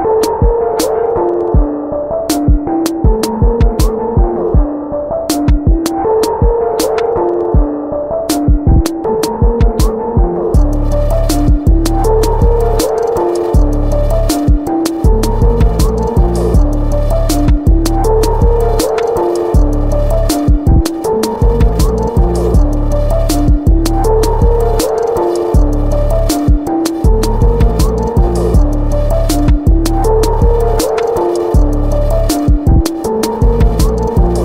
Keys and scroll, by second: 7.4 ctrl+z, 8.0 b, 9.1-9.8 ], 10.3 ], 11.2 x, 28.1 x, 30.1 ctrl+t.